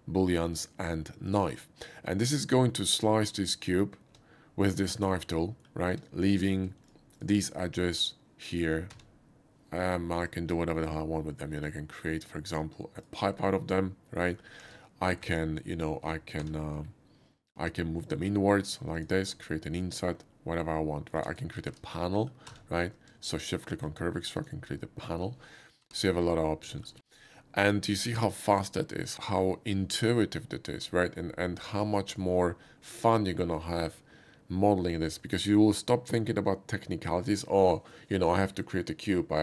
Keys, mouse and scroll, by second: 1.3 click, 3.2 click, 4.1 Tab, 4.7 middle click, 6.4 click, 6.8 shift+click, 7.6 shift+middle click, 8.9 q, 10.3 alt+click, 13.0 alt+click, 13.3-14.3 middle drag, 14.6 ctrl+z, 16.4 q, 17.0 alt+q, 18.0 click, 18.9 alt+click, 19.2 Tab, 19.8-21.1 middle drag, 21.6 ctrl+z, 21.9 middle click, 22.5 q, 23.6 shift+click, 24.3 shift+click, 24.7 shift+middle click, 25.8 g, 26.3 right click, 26.7 middle click, 26.9 x, 27.1 click.